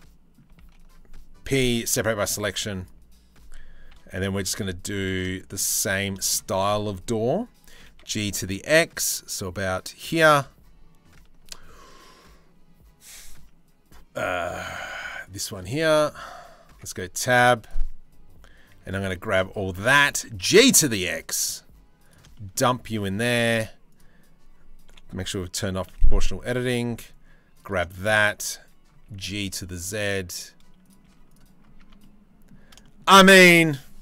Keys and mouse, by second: 0.2 ctrl+z, 1.1 p, 2.1 Tab, 3.5 KP_3, 3.8 KP_1, 4.2 z, 5.0 shift+middle click, 5.2 z, 5.8 shift+middle click, 7.3 g, 10.0 1, 15.5 shift+middle click, 16.3 Tab, 16.8 a, 18.3 c, 19.8 g, 22.9 1, 24.5 o, 25.6 c, 28.7 g, 30.6 z, 31.5 Tab, 32.4 shift+middle click.